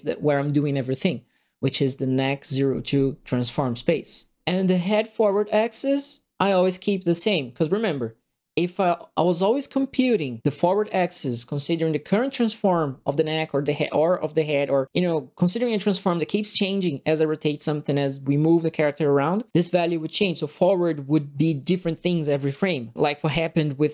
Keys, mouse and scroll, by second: 4.6 click, 6.1 right click, 6.4 click.